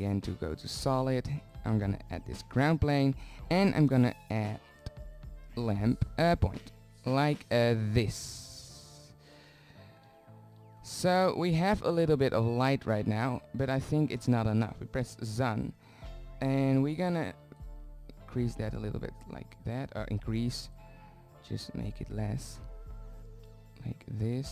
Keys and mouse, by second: 0.6-2.0 drag, 9.1 shift+z, 18.1 middle drag, 19.7 click, 20.2 click, 23.7 z, 24.1 z.